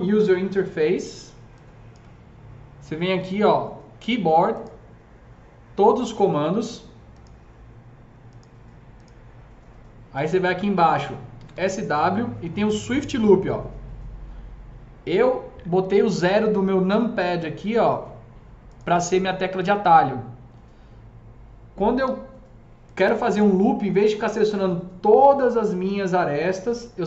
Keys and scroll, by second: 11.2-12.0 typing, 25.7 F3, 26.6 F4.